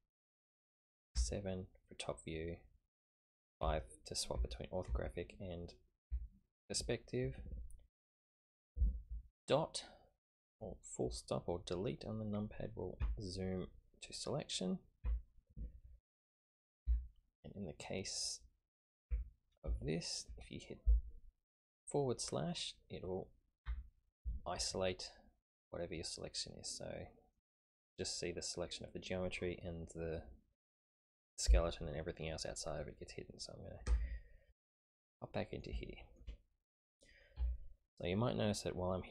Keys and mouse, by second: 1.1 KP_7, 3.6 KP_5, 4.3 KP_5, 4.9 KP_5, 6.0 KP_5, 9.7-10.5 drag, 13.0 KP_Decimal, 15.0 KP_Decimal, 16.8 a, 17.3-18.7 middle drag, 18.7 click, 19.1 Tab, 19.7-20.2 shift+drag, 25.7-27.4 middle drag, 33.8 KP_Divide, 35.0-35.6 middle drag, 35.9 shift+middle click, 37.3 KP_1.